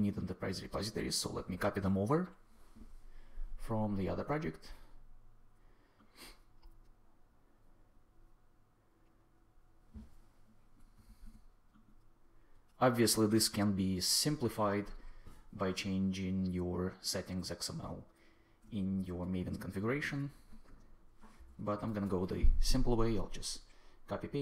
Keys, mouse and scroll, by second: 10.9 super+c, 19.8 super+v, 21.2 Return, 21.8 super+s.